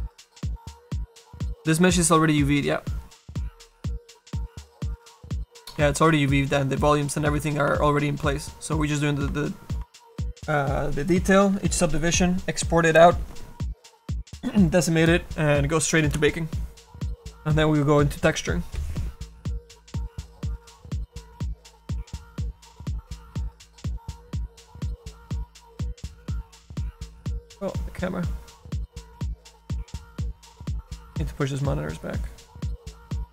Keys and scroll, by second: 6.7 F7.